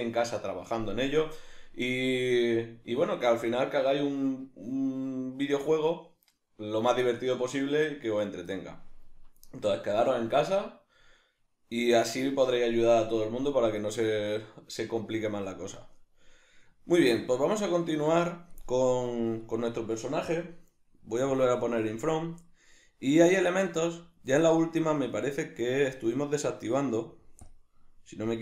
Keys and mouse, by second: 21.3 drag, 22.4-24.5 middle drag, 24.5 right click, 26.3 right click, 27.5 drag.